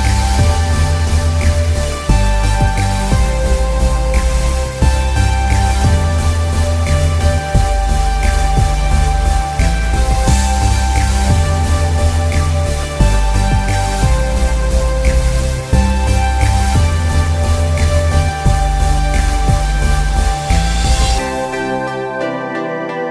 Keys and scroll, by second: 9.3 space, 11.0 space, 12.9 e, 14.2 space, 15.8 space, 18.0 space.